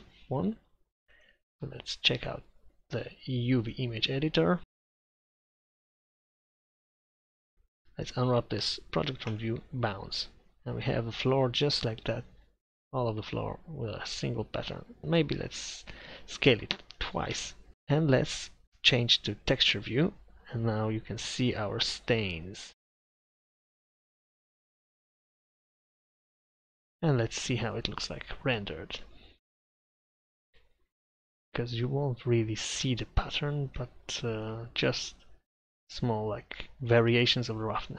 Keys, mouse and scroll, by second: 4.7 middle click, 5.2 KP_7, 5.5 KP_5, 7.2 u, 10.7-12.2 middle drag, 14.4-15.5 middle drag, 15.5 click, 16.1 s, 17.4 Tab, 18.7 click, 20.8 middle click, 23.0 Tab, 23.7 s, 23.9 s, 24.0 Tab, 24.6 ctrl+z, 24.8 Tab, 25.5 r, 25.9 Tab, 27.8-30.0 drag.